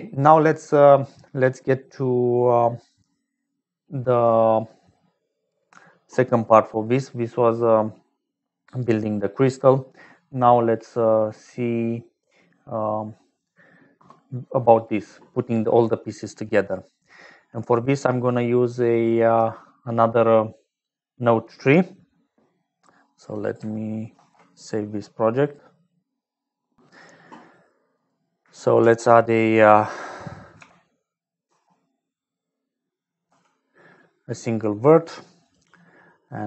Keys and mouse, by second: 1.2 right click, 3.2-4.5 right drag, 19.4-23.3 drag, 24.0 ctrl+s, 27.9 click, 28.7 shift+a, 35.3 click, 36.1 click.